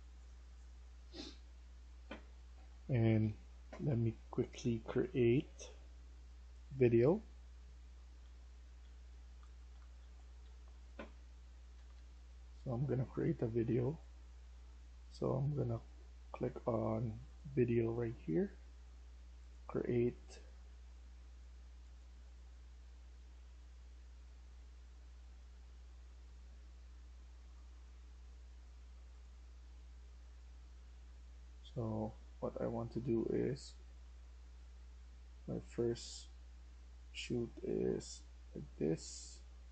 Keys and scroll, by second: 2.4 F1, 6.1-7.5 typing, 8.1 Escape, 8.1 F1, 8.7-10.3 typing, 11.6 Escape, 11.8 Escape, 12.2-13.6 typing, 15.8 s, 19.6-21.6 typing, 22.0 Escape, 23.5 typing, 30.1-34.4 typing.